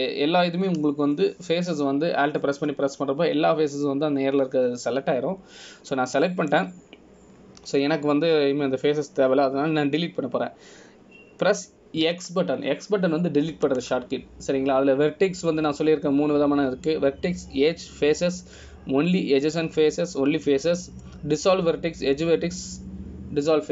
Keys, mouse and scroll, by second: 4.1-4.7 scroll down 1, 4.7 middle click.